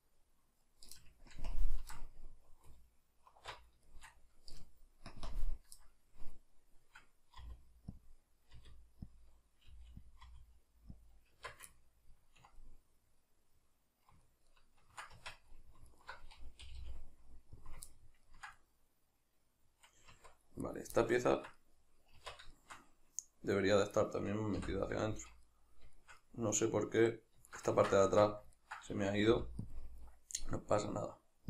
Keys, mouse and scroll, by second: 1.3 ctrl+KP_Add, 2.7 alt+q, 3.9 shift+middle click, 5.1 ctrl+KP_Subtract, 5.1-8.1 middle drag, 7.4 r, 8.1 click, 8.5 r, 9.2 click, 9.7 g, 10.1 click, 10.3 r, 11.1 click, 11.4 Tab, 11.8-15.9 ctrl+middle drag, 15.2 Tab, 15.9 alt+right click, 16.7 g, 17.7 click, 17.9-20.7 ctrl+middle drag, 20.1 Tab, 20.7 right click, 21.0-23.9 middle drag, 22.2 Tab, 23.9 right click, 24.6 l, 25.0-29.8 ctrl+middle drag, 28.0 Tab, 29.3 f, 29.8 click.